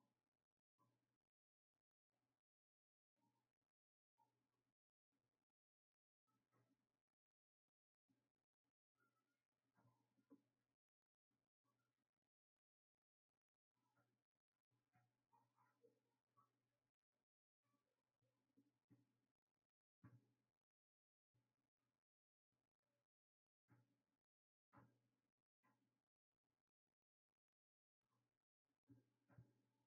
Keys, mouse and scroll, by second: 17.0 click, 20.5-29.8 drag.